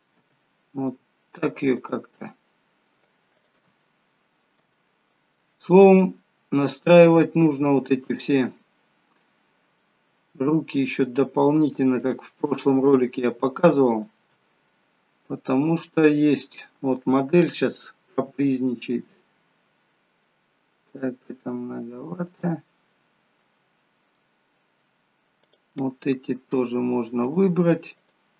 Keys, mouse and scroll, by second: 0.2 g, 3.4 click, 3.8-4.6 scroll up 2, 4.6 shift+middle click, 4.6 scroll up 4, 5.6 middle click, 8.2-8.6 scroll up 2, 8.4 middle click, 10.9 middle click, 10.9 click, 11.9 shift+click, 14.2 shift+click, 14.7 middle click, 15.5-16.1 scroll down 2, 15.9 middle click, 18.1 r, 22.8 middle click, 25.4 click, 26.5 shift+click.